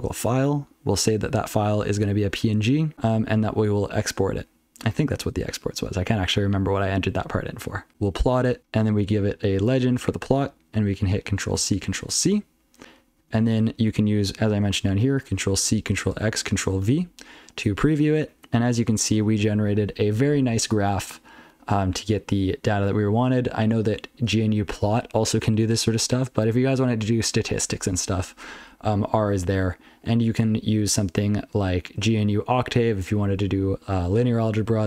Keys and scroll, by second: 0.9 ctrl+alt+f, 1.2 ctrl+alt+f, 1.6 ctrl+alt+f, 2.4 ctrl+f, 2.6 ctrl+f, 2.9 ctrl+a, 3.3 ctrl+f, 3.9 ctrl+a, 4.2-4.7 ctrl+f, 5.7 ctrl+a, 6.0 ctrl+b, 6.6 ctrl+n, 7.5 ctrl+a, 7.9 ctrl+n, 8.0 ctrl+p, 8.4 ctrl+n, 9.0 ctrl+alt+f, 12.4 ctrl+c, 12.8 ctrl+n, 12.9 ctrl+n, 13.9 ctrl+n, 14.9 ctrl+p, 15.1 ctrl+p, 15.5 ctrl+p, 16.8 ctrl+v, 17.9-18.3 ctrl+n, 18.7 ctrl+p, 29.2 ctrl+p, 29.5 ctrl+p, 29.9 ctrl+n, 30.2 ctrl+p, 30.6 ctrl+d.